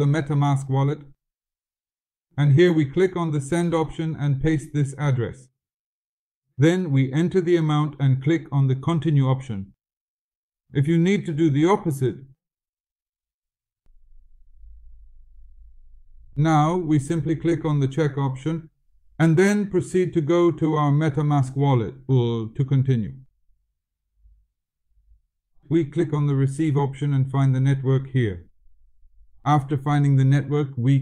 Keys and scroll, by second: 5.0 ctrl+v.